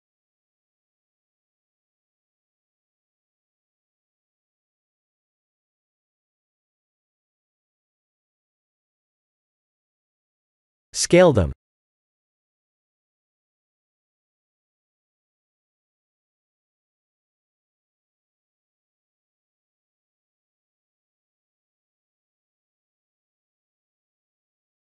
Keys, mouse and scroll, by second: 0.7 b, 3.3 click, 4.8 click, 9.4 ctrl+z, 10.6 click, 11.4 b, 12.4 b, 14.2 click, 16.1 Tab, 17.0 s, 22.5 Tab, 24.6 scroll up 2.